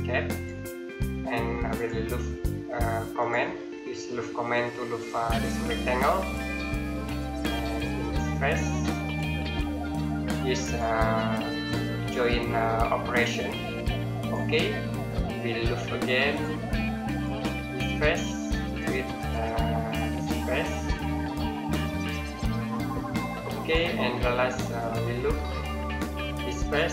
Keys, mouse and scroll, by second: 3.7 middle click, 4.3 scroll down 1, 5.1 click, 5.5 scroll down 1, 5.7-6.4 scroll up 1, 6.4 middle click, 7.1-7.5 scroll up 1, 7.5-8.5 scroll down 1, 8.9 click, 9.4 scroll down 1, 10.5 click, 14.7 middle click, 16.1 click, 18.3 scroll down 1, 18.5-19.2 scroll up 1, 19.8 middle click, 20.4-21.8 scroll down 1, 21.8 click.